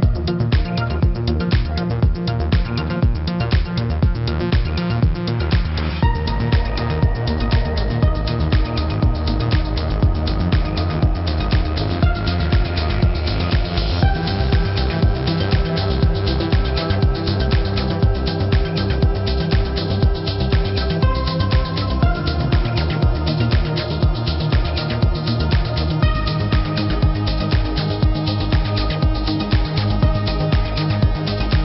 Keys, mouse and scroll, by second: 0.0 space, 0.1 click, 0.3 space, 0.7 click, 1.7 shift+click, 2.3 click, 3.5 i, 4.8 x, 5.3 click, 5.7 click, 7.7 click, 8.5 click, 8.7 =, 9.1 click, 9.9 shift+click, 10.5 click, 12.0 i, 12.5 shift+click, 12.8 click, 14.3 click, 14.7 =, 15.1 click, 15.7-16.7 typing, 16.1 click, 17.4 click, 18.5 typing, 19.1 click, 19.4 click, 21.1 Right, 21.3 click, 21.4-22.9 typing, 22.2 click, 23.2 click, 24.5 ctrl+z, 24.6 click, 25.4 click, 28.4 F9, 28.8 click, 30.7 b, 30.9 space.